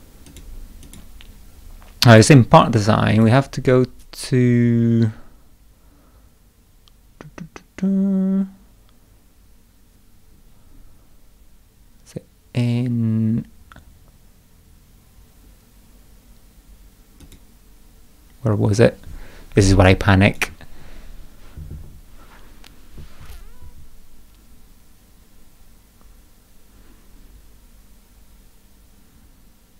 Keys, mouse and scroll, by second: 0.3 click, 0.9 click, 2.1 click, 3.1 click, 17.2 click, 20.3 click.